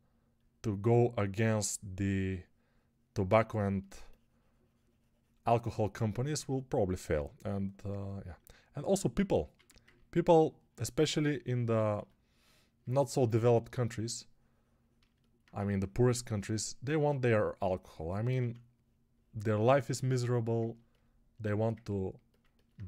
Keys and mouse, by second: 7.0 g, 9.4 1, 15.4 2, 18.2 1.